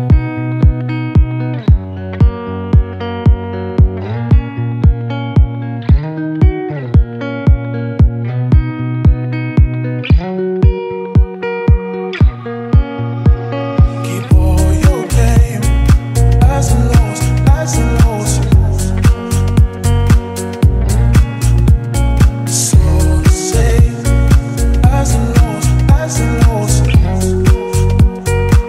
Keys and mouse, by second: 5.6 ctrl+z, 5.9 middle click, 9.3 middle click, 17.6 middle click, 22.0 middle click, 23.9 alt+middle click, 27.0 alt+middle click, 28.4 alt+middle click.